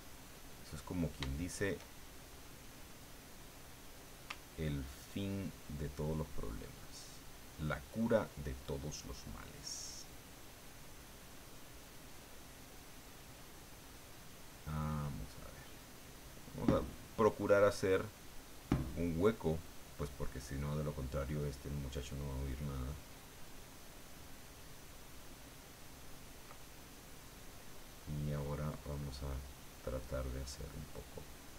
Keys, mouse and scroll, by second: 0.7-2.8 drag, 3.3 click, 4.9-26.5 ctrl+drag, 26.5 ctrl+click, 26.6-27.8 ctrl+middle drag, 28.4-30.7 drag, 30.7-31.5 drag.